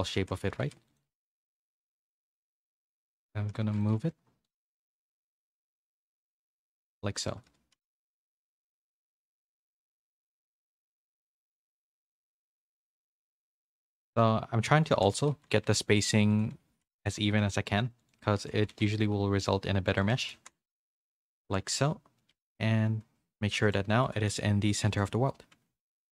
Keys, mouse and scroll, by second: 0.6-12.3 typing, 13.4-17.2 typing, 18.4-21.4 typing, 21.7 middle click, 22.3 Tab, 23.6 click, 24.9-26.1 drag.